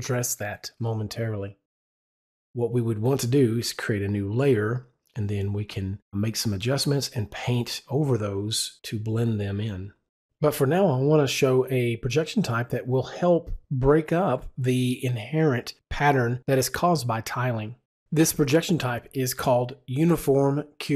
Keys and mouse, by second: 12.3 click, 16.2 KP_0, 16.6 KP_Enter, 19.4 KP_Enter, 19.7 click.